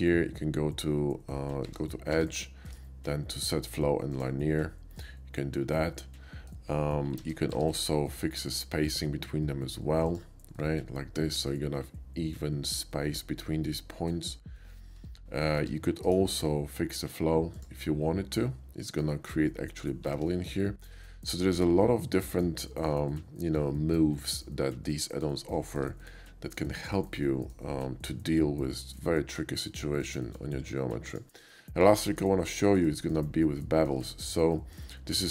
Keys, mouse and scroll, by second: 1.7 Tab, 2.6 Tab, 4.1 click, 5.0-6.5 middle drag, 7.2 ctrl+z, 7.5 Tab, 7.6 ctrl+z, 8.1 middle click, 8.4 right click, 10.1 click, 10.6 middle click, 13.9 middle drag, 14.5 middle click, 15.0 Tab, 16.1 right click, 17.5 click, 18.4 middle click, 20.1 ctrl+z, 20.6-22.4 middle drag, 22.7 shift+middle click, 23.1-24.4 shift+middle drag, 24.7 shift+middle click, 24.9 shift+middle click, 25.7 middle click, 26.0 middle click, 26.8 shift+middle click, 27.1 shift+middle click, 28.0 shift+middle click, 29.7 middle click, 30.2 middle click, 30.7 x, 31.1 click, 31.5 middle click, 32.1 shift+middle click, 32.4 shift+middle click, 33.0 shift+middle click, 33.3 shift+middle click, 33.7 shift+middle click, 34.1 shift+middle click, 34.5 shift+middle click, 35.2 shift+middle click.